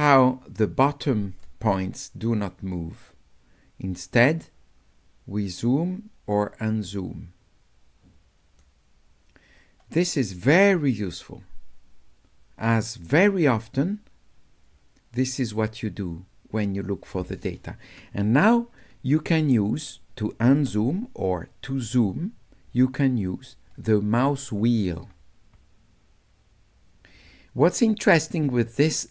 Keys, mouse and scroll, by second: 4.5-8.6 right drag, 10.3-17.4 right drag, 21.7 middle click, 23.0-25.0 middle drag, 25.1-28.6 middle drag.